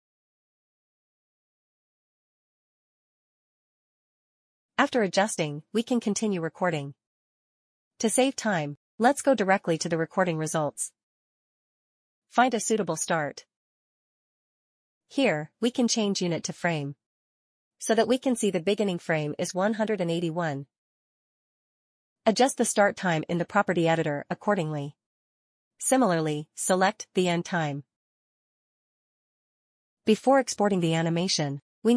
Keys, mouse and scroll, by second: 0.7 shift+c, 1.2 click, 1.4 click, 2.2 click, 2.9 click, 3.7-4.2 scroll up 1, 4.2 right click, 4.7 right click, 7.7 click, 12.9 click, 16.1 click, 19.9 click, 20.5 scroll down 1, 22.8 click, 23.7-25.1 typing, 25.2 Return, 26.4 click, 26.8 click, 26.9 middle click, 27.1 click, 27.3 click, 27.4 middle click, 27.4 scroll up 2, 27.5 middle click, 27.6 click, 28.3 click, 29.6 Return, 30.7 click.